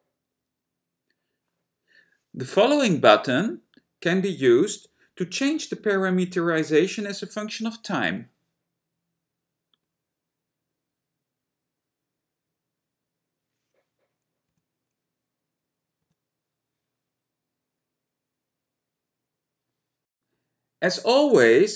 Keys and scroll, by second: 14.7 F10, 16.1 F11.